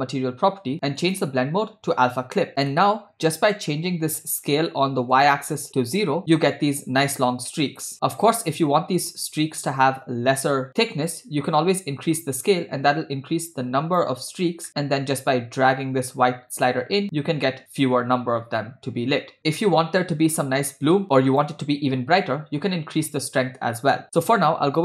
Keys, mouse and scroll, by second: 1.0-2.5 drag, 2.7 middle click, 5.2-6.2 drag, 8.0 scroll down 2, 8.3 scroll up 1, 11.6-14.0 drag, 14.8 middle click, 15.3-19.4 drag, 19.4 middle click, 20.0-20.5 drag, 21.0 click, 22.8-24.0 drag, 24.1-24.8 drag.